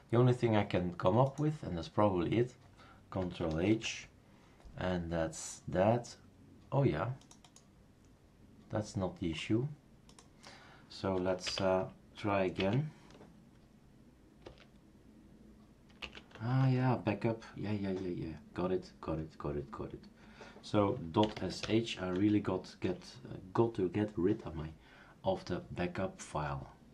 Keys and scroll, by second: 3.7 ctrl+h, 11.4 Up, 12.6 Up, 14.4 Return, 16.0 Up, 16.3 Tab, 16.6 Tab, 21.0-22.1 typing.